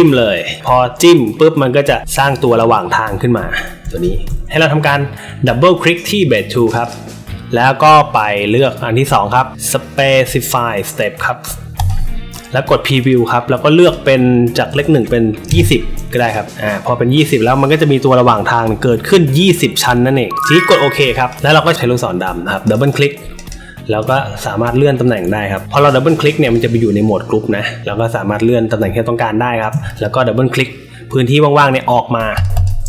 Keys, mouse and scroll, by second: 6.6 click, 6.8 click, 8.5 click, 11.7 click, 12.9 click, 13.7 click, 16.2 click, 16.4-17.1 drag, 21.3 click, 22.6 click, 22.8 click, 23.3 click, 23.9-26.5 shift+drag, 27.8-29.5 shift+drag, 32.3 click, 32.5 click.